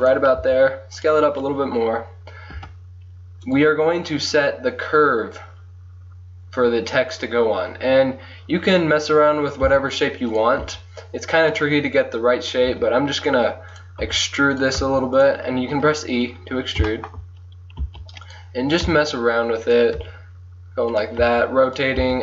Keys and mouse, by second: 0.5 s, 2.6 Tab, 3.5-5.2 drag, 9.7 s, 10.7 g, 12.8 e, 14.2 r, 14.8 g, 17.9 s, 18.8 click, 18.9 r, 19.5 click, 20.0 g, 21.3 r, 22.1 e.